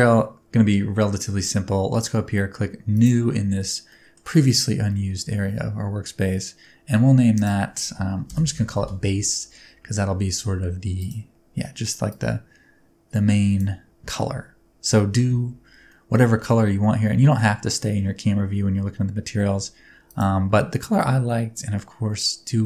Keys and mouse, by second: 0.2 middle click, 3.0 click, 3.9 middle drag, 4.9-5.3 middle drag, 7.4-9.5 drag, 16.0 middle click, 16.8-17.5 middle drag, 20.1 click.